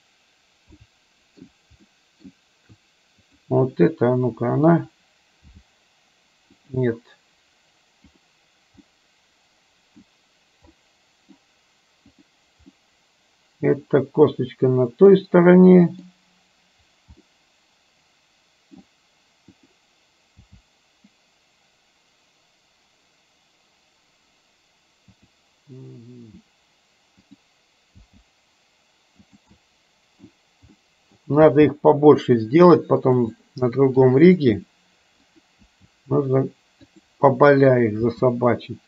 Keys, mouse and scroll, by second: 0.8 scroll up 1, 0.9 shift+middle click, 1.9 scroll up 1, 2.0 shift+middle click, 3.3 click, 5.4 g, 9.0-10.2 middle drag, 10.8 middle click, 12.2 click, 12.9-15.2 middle drag, 15.7 middle click, 17.4-18.9 middle drag, 19.7 click, 20.5 g, 27.4 click, 28.2 g, 29.7-30.3 middle drag, 30.9 middle click, 31.5 g, 33.4 middle click, 34.4 g, 35.7 g, 37.9 click, 38.2 g.